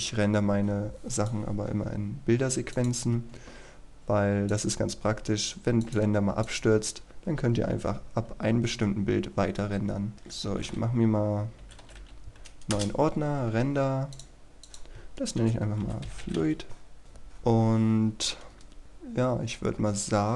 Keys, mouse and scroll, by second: 10.6-12.3 typing, 12.7 Return, 14.2 click, 15.1-16.9 typing, 17.0 Return, 18.4-18.8 scroll down 1, 18.8-20.3 scroll up 1.